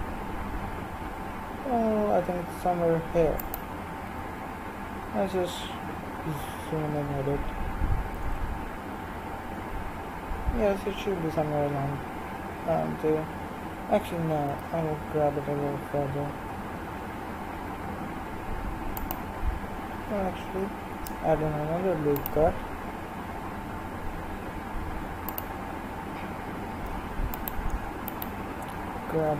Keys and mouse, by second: 14.0 g, 20.9 ctrl+r, 27.9-29.2 right drag, 29.2 g.